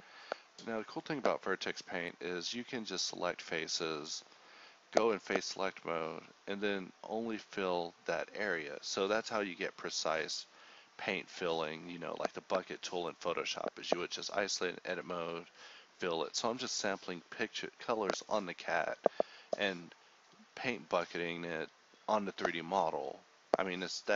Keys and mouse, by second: 0.4 shift+k, 1.1 Tab, 2.2 h, 2.3 Tab, 2.8 alt+h, 3.2 alt+h, 3.2 Tab, 3.8 a, 4.8 ctrl+z, 5.1 a, 5.8 KP_1, 6.3 ctrl+KP_1, 6.3 ctrl+KP_3, 6.9 ctrl+Tab, 7.5 a, 7.7 z, 8.0 a, 10.1 Tab, 10.7 click, 11.8 shift+k, 12.2 Tab, 12.3 Tab, 13.3 Tab, 14.0 ctrl+z, 15.9 h, 16.1 z, 16.3 Tab, 16.5 Tab, 17.3 h, 17.8 l, 17.8 l, 18.4 z, 18.9 Tab, 19.5-20.7 drag, 21.0 z, 21.4-22.5 drag, 22.5 z, 23.0 Tab, 23.7 click.